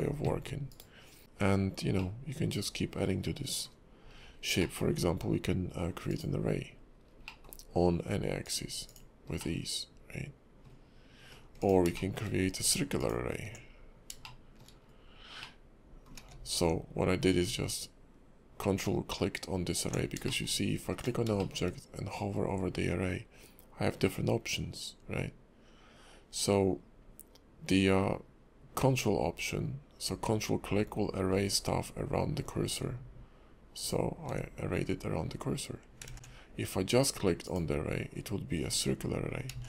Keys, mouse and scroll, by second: 0.7 right click, 1.2 middle click, 1.2 scroll down 3, 2.3 middle click, 4.1-4.6 scroll down 3, 4.6 middle click, 6.1 click, 6.7-7.2 scroll down 5, 7.2 middle click, 8.4 click, 8.9 click, 9.4 middle click, 11.6 click, 11.9 shift+middle click, 13.0 ctrl+click, 14.2 shift+middle click, 14.7 scroll up 2, 15.4 middle click, 16.4 ctrl+z, 20.3 shift+middle click, 20.5-21.3 scroll up 3, 20.9 click, 21.4 shift+middle click, 31.3-32.8 scroll down 3, 33.8 ctrl+click, 36.2 ctrl+z, 37.4 click, 38.5 scroll up 2, 38.7 scroll down 1, 38.8 scroll up 1, 39.0 scroll down 3.